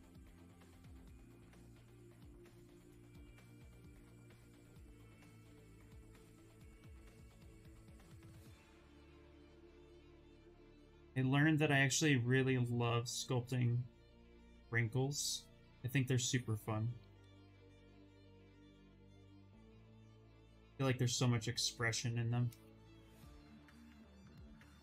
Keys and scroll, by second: 16.9 d.